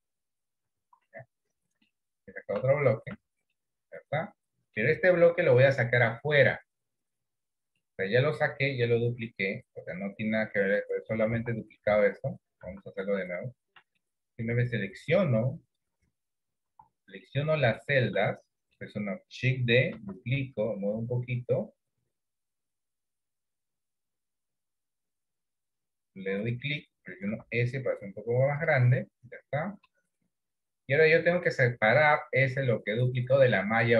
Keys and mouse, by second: 0.8 ctrl+z, 1.4 middle click, 2.6 Tab, 3.2 Tab, 3.7-4.9 middle drag, 6.0 KP_3, 8.0 middle click, 9.8-10.9 drag, 11.4 ctrl+z, 11.9 ctrl+z, 12.8 ctrl+z, 13.1 ctrl+z, 14.1-15.2 middle drag, 15.9 click, 17.0 ctrl+z, 17.3 middle click, 17.9 middle click, 18.4 middle click, 20.0 shift+d, 27.4 s, 29.1 middle click, 31.6-33.9 middle drag.